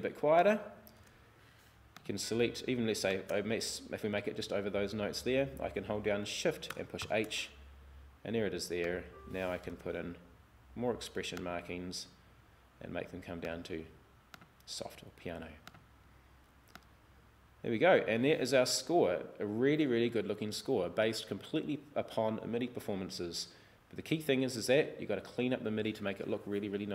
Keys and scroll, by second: 7.0 shift+h.